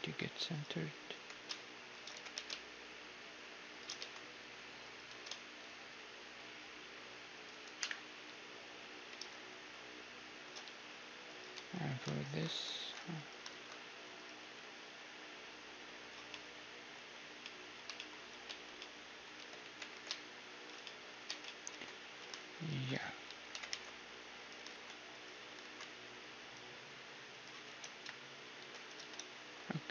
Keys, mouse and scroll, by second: 0.0 Tab, 0.5-2.5 right drag, 1.1 g, 2.1 g, 4.0 s, 5.0 s, 7.8 KP_1, 8.3 z, 9.1 g, 10.6 z, 11.3-14.0 right drag, 11.5 Tab, 12.7 alt+s, 13.5 alt+s, 14.0 middle click, 14.5 s, 16.3-23.3 middle drag, 18.5 Tab, 19.4 Tab, 19.7 g, 21.3 Tab, 21.7 Tab, 22.0 z, 22.6-24.4 right drag, 23.3 z, 23.5 g, 24.7 alt+s, 24.7 right click, 25.6 alt+s, 27.7 Tab, 28.0 KP_1, 28.6 Tab, 29.0 ctrl+z.